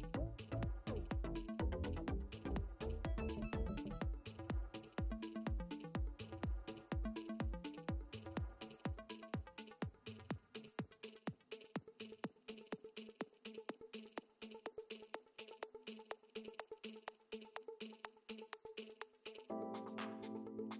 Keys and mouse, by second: 2.8 click, 3.9 click, 7.1 click, 8.8 click, 11.6 click, 13.4 click, 15.5 click, 17.0 click, 18.0 ctrl+z, 19.2 alt+click.